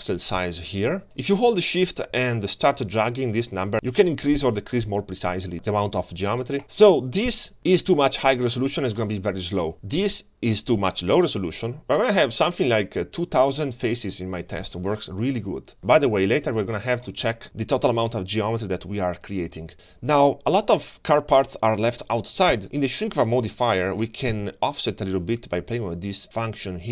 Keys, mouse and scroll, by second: 0.8 shift+click, 2.1-7.5 shift+drag, 7.8-17.7 shift+drag, 18.5 middle click, 24.0-26.9 shift+drag.